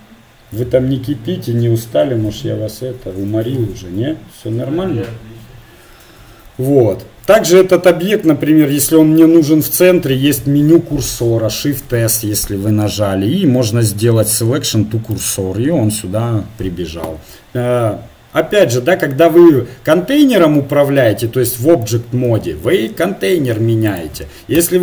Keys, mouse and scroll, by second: 11.6 shift+s, 22.3 s, 24.6 Tab.